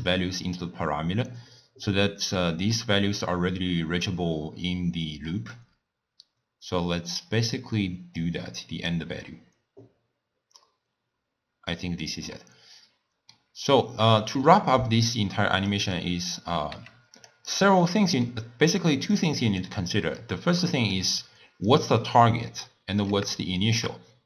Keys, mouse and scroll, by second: 2.8-7.5 middle drag, 7.5 drag, 11.7-13.7 middle drag, 13.7 scroll down 2, 15.0 scroll down 2, 15.7 click, 16.8 g, 17.5 drag, 17.8-19.2 middle drag, 19.2 click, 20.2 click, 21.7 click, 22.5-24.2 middle drag.